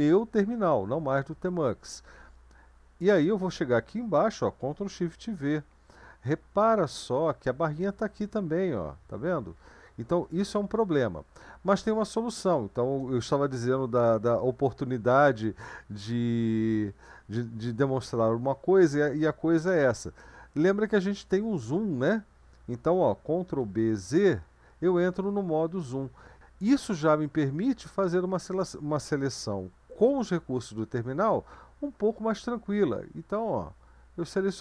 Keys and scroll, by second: 5.0 ctrl+v, 7.3 Left, 7.8 Left, 8.0 Left, 8.3 Right, 8.5 Right, 8.6 Right, 9.0 Left, 9.2 Left, 9.6 Right, 9.7 Right, 11.0 BackSpace, 11.7 BackSpace, 11.8-13.0 BackSpace, 23.6 ctrl+b, 24.2 z.